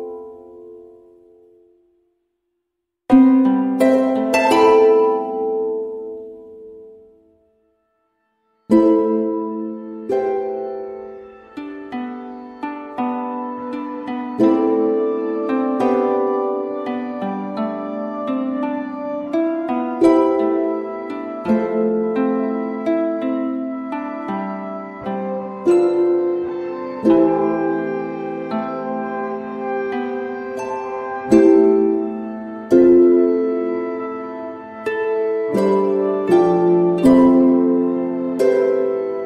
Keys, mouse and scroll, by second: 5.6 m, 8.3-14.2 drag, 14.2 i, 14.9 click, 15.4 v, 16.9 ctrl+shift+[, 17.7 v, 18.0 click, 21.3 i, 21.6 click, 22.2 v, 22.6-37.5 drag.